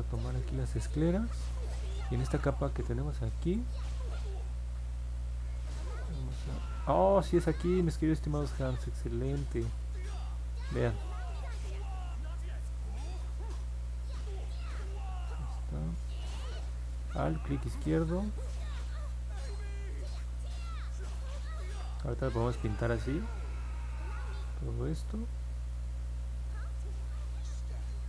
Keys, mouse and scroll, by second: 1.8 click, 2.7 alt+click, 6.6-15.0 drag, 17.2-18.8 alt+drag, 20.3-28.0 drag.